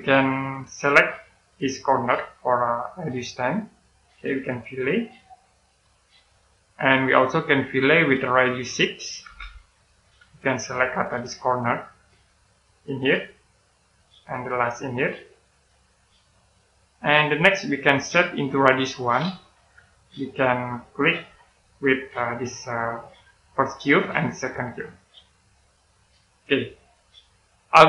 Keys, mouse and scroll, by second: 2.1 click, 5.4 click, 6.1 middle click, 8.0 click, 9.1 6, 9.7 click, 16.1 middle click, 18.3 click, 19.4 1, 20.2 click, 21.0-23.5 scroll up 1, 23.5 click, 24.9 click, 25.5 middle click, 26.5-27.2 scroll down 1, 27.2 middle click.